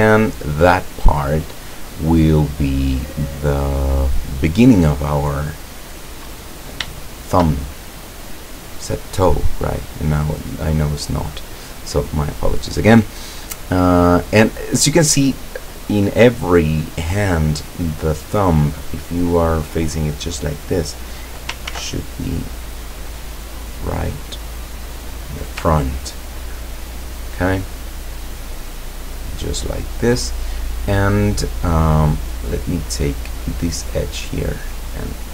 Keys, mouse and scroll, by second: 2.5-4.1 middle drag, 4.3-4.8 scroll up 2, 5.5-6.4 middle drag, 6.4-6.9 scroll down 2, 7.0-9.3 shift+middle drag, 21.7 ctrl+r, 22.8 click, 24.9 click, 28.1-28.5 middle drag, 28.7-30.5 middle drag, 32.3 right click, 33.1 right click, 33.6-34.3 middle drag, 34.3-34.9 scroll up 1.